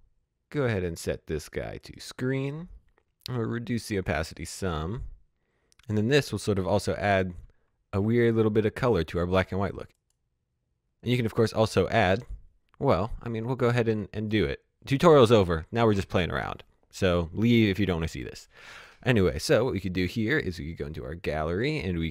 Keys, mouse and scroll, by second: 3.7 click, 7.1 space, 9.5 space, 9.9 click, 14.1 click, 18.1 click, 20.3 click, 21.9 right click.